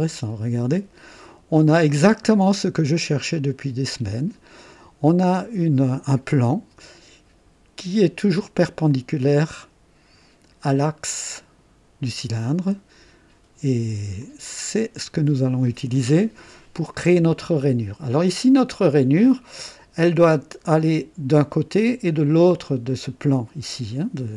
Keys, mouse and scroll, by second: 6.4-8.1 drag, 8.9-10.7 drag, 12.3-14.1 drag, 14.2-15.9 drag, 16.9-18.2 drag, 18.5 scroll up 1, 18.9-19.7 right drag, 19.7 typing.